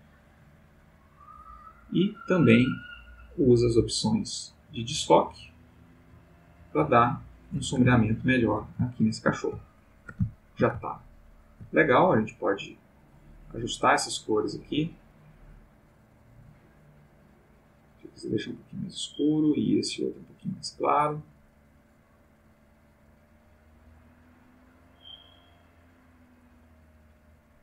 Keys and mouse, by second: 2.0 click, 2.8-5.1 drag, 5.5-7.2 drag, 8.0 ctrl+middle click, 8.9 ctrl+shift+middle click, 9.6 ctrl+shift+middle click, 10.4 ctrl+shift+middle click, 11.1 ctrl+middle click, 13.2 click, 15.1 click, 16.5-18.9 drag, 19.8 click, 20.1 click, 20.8 click, 22.5-26.6 drag.